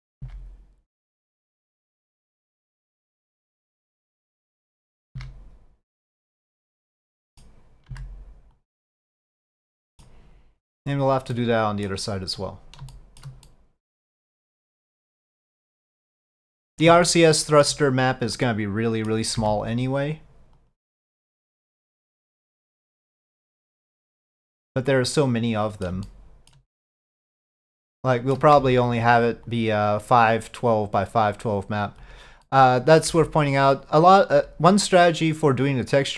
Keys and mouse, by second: 2.2-4.9 middle drag, 6.9 middle click, 8.0 c, 9.5 middle click, 11.4 middle click, 13.0 shift+middle click, 13.5 middle click, 14.7-16.9 middle drag, 17.2 shift+middle click, 18.4 middle click, 21.7-22.9 middle drag, 24.4-26.0 middle drag, 26.1 shift+middle click, 27.6 shift+middle click, 32.5 middle click, 34.1 c, 34.9-36.1 middle drag.